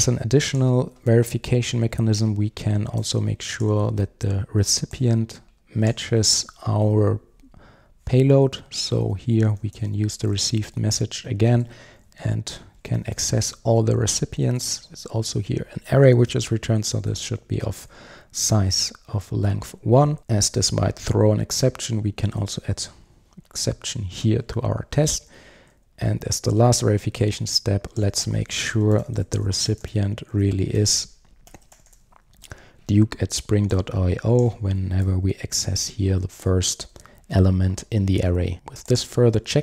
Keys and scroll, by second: 1.6 super+d, 11.8 Return, 20.1 Return, 20.6 super+x, 24.6 alt+Return, 25.6 super+d, 36.9 super+s.